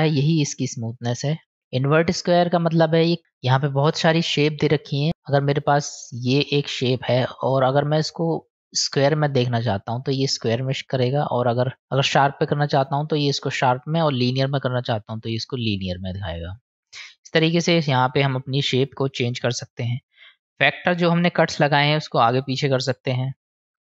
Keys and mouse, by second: 2.7 click, 3.8-5.3 drag, 6.3-9.3 drag, 10.6-13.3 drag, 14.0-15.0 drag, 16.3-17.1 drag, 21.1-23.8 drag.